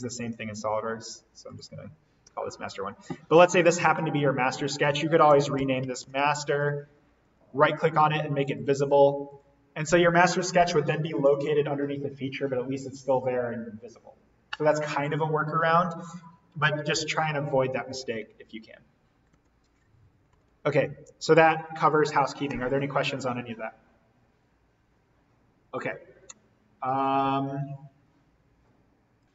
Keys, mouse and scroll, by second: 2.2 1, 3.0 click, 4.9-6.7 typing, 6.5 click, 7.2 right click, 8.4 click, 17.8 click, 18.0 ctrl+z, 26.9 click, 29.2 click.